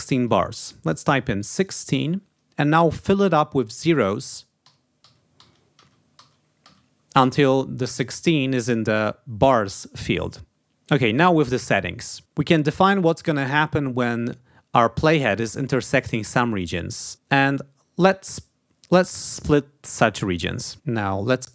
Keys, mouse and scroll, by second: 1.2 1, 1.7 6, 4.5 0, 19.2 click.